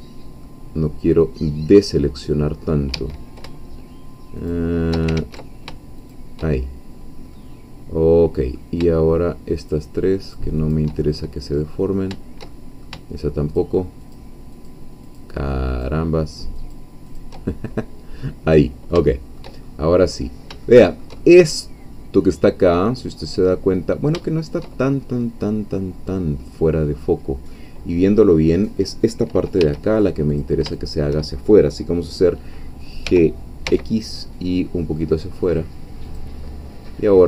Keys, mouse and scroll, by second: 0.9-2.0 drag, 2.1 click, 2.9 Escape, 4.5 shift+click, 5.2 ctrl+shift+z, 6.0 shift+click, 6.5 shift+scroll down 1, 7.3-8.8 middle drag, 9.6 shift+click, 10.3 shift+click, 11.0 shift+middle click, 11.6-12.1 shift+scroll up 2, 12.5 shift+middle click, 13.6 shift+click, 14.7 shift+click, 15.8-16.9 shift+drag, 17.2 shift+click, 17.5 shift+scroll down 2, 17.7-19.5 shift+middle drag, 19.6-20.3 shift+scroll up 3, 20.7-24.7 shift+middle drag, 24.7-26.9 shift+middle drag, 27.1 middle click, 27.8-28.2 scroll up 2, 29.6 1, 30.3 click, 30.9 shift+click, 33.0 g, 33.7 x, 36.0 click, 36.4 middle click.